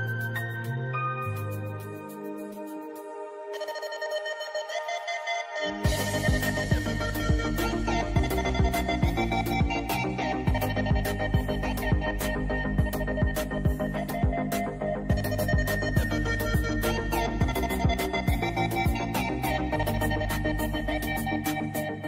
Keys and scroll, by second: 9.0 ctrl+c, 9.3 ctrl+f, 13.1 i, 14.5 v, 21.5 a.